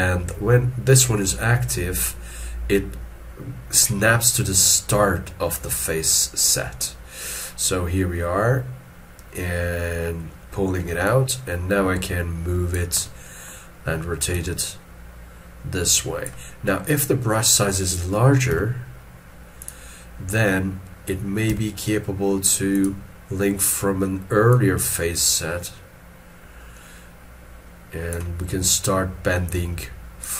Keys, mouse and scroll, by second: 1.5-3.6 scroll down 1, 13.0 middle click.